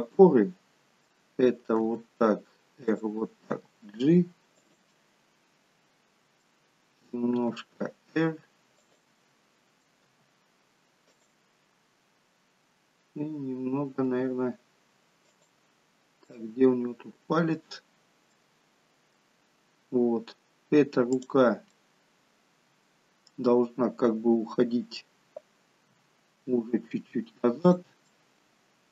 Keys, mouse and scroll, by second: 2.0 r, 3.6 g, 5.0 middle click, 5.0 scroll up 1, 7.5 r, 9.3 middle click, 10.1 r, 14.2 r, 16.0-16.4 scroll up 3, 16.4 middle click, 17.1 middle click, 17.8-18.5 scroll down 3, 18.5 middle click, 19.8-21.1 scroll down 1, 21.2 click, 21.8 middle click, 26.0 g, 28.2 middle click.